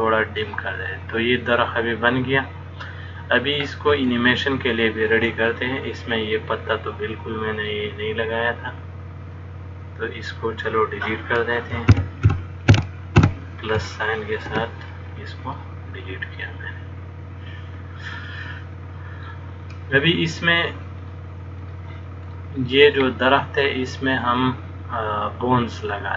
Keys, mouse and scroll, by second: 2.7 middle click, 4.4 shift+middle click, 5.8 middle click, 9.4 click, 12.1 ctrl+KP_Add, 12.5 ctrl+KP_Add, 12.9 ctrl+KP_Add, 13.4 ctrl+KP_Add, 14.8 x, 16.7 middle click, 21.2 click, 22.6 middle click, 23.4 click, 24.2 middle click.